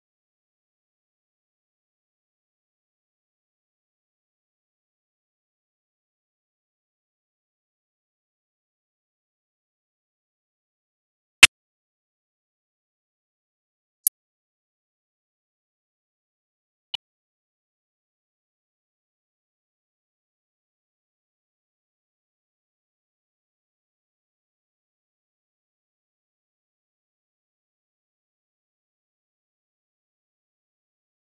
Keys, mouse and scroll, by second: 1.0 click, 1.3 middle click, 1.4 scroll down 9, 1.6 click, 1.7 0, 2.1 middle drag, 2.3 KP_0, 2.6 scroll down 2, 2.7 shift+middle click, 2.8 scroll up 2, 3.1 Home, 3.3 scroll down 8, 3.5 scroll up 1, 3.7 click, 3.8 Tab, 4.1 Tab, 4.7 click, 4.9 Tab, 5.5 Tab, 5.6 click, 5.7 Tab, 6.0-6.5 scroll up 6, 6.1 click, 6.2 0, 6.5 middle click, 6.7-7.2 drag, 7.2 Tab, 7.9 click, 8.9 Tab, 9.0 Tab, 9.1 click, 9.2 shift+a, 10.0 click, 10.0 shift+a, 11.3-12.4 drag, 12.4 shift+a, 13.1 scroll up 6, 13.2-13.6 shift+middle drag, 13.6 ctrl+b, 14.0 z, 14.6 middle drag, 14.8 click, 15.7-17.1 drag, 17.6 ctrl+c, 17.7 click, 17.9 middle click, 17.9 ctrl+v, 18.2-18.7 drag, 19.2 click, 19.8 middle click, 20.1 click, 20.4 shift+d, 21.7-22.0 drag, 22.0 middle drag, 22.1 ctrl+shift+click, 23.0 shift+d, 23.7 drag, 24.6 click, 24.7 scroll down 1, 25.3 ctrl+alt+b, 25.7 KP_0, 25.9 KP_0, 26.2 shift+middle click, 26.4 scroll down 2, 26.7 click, 27.8 ctrl+b, 28.5-29.5 drag, 29.5-29.9 scroll up 4, 29.9 shift+middle click, 30.6 click, 30.8 0.